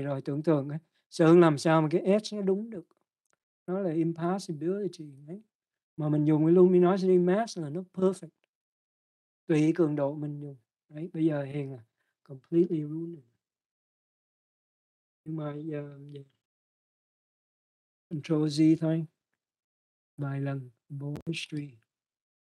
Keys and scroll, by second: 20.7 ctrl+z.